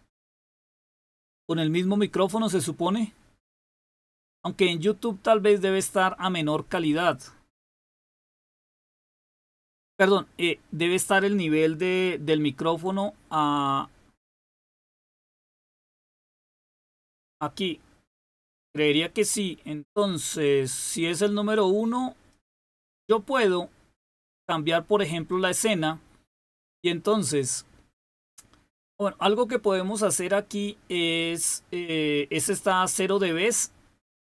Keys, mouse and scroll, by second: 22.3 click, 25.3-27.9 drag.